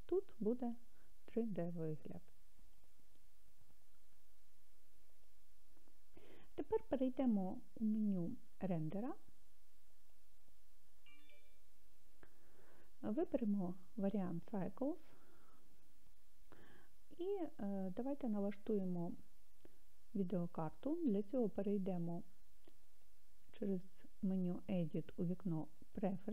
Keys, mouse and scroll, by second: 5.2 click, 10.0 click, 13.1-15.1 drag, 22.9-26.2 drag.